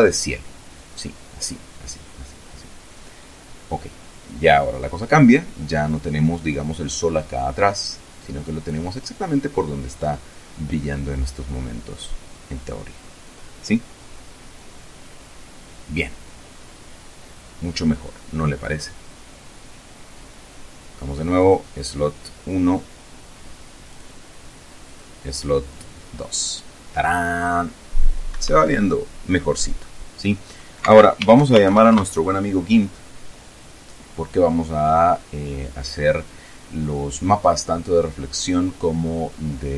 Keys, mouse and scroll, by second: 21.0 click, 23.5 click, 24.5 click, 25.3 click, 27.9 Escape, 29.0-29.5 scroll down 2, 30.5 alt+F2, 30.8 alt+g, 31.0 alt+i, 31.4 alt+p, 31.5 alt+Return.